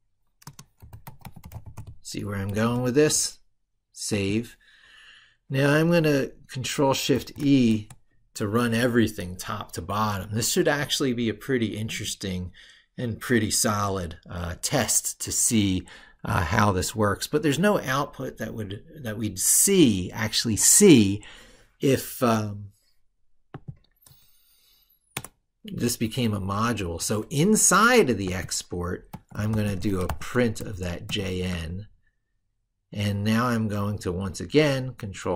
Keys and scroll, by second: 2.3 ctrl+s, 7.0 ctrl+shift+e.